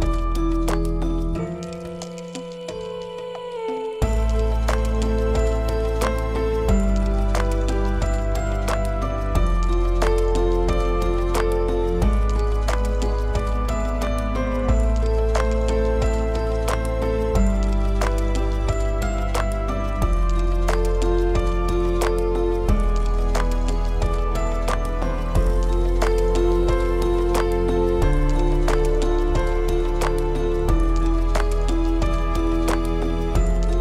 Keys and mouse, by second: 2.3 click, 2.9 click, 5.1 click, 5.6 Tab, 7.7 shift+click, 8.5 shift+click, 9.4-9.8 drag, 10.3 shift+click, 11.2 shift+click, 12.6 middle click, 13.8 shift+click, 14.3 click, 15.3 shift+click, 16.2 shift+click, 16.8 shift+click, 17.8 shift+click, 18.2 middle click, 19.3 shift+click, 20.1 shift+click, 20.9-22.3 drag, 23.0 shift+click, 24.0 click, 24.0 middle click, 25.5 shift+click, 27.0 shift+click, 28.2 shift+click, 28.9 shift+click, 29.8 shift+click, 32.5 shift+click.